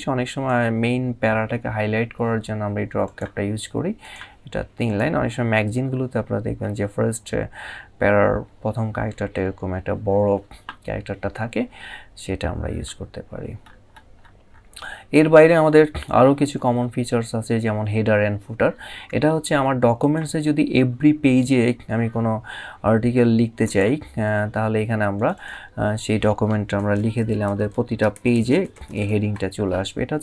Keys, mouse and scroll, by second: 2.7 click, 5.5-6.1 scroll down 2, 6.3 scroll up 1, 12.2 scroll down 1, 13.4 scroll up 1, 19.7 click, 23.3 click, 24.8 click, 26.4 typing, 29.5-30.2 typing, 30.0 click.